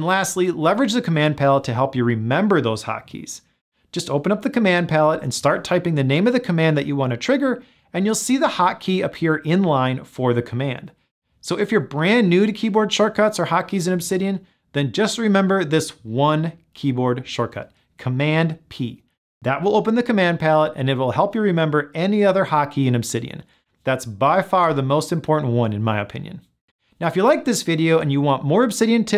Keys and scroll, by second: 5.0 super+p.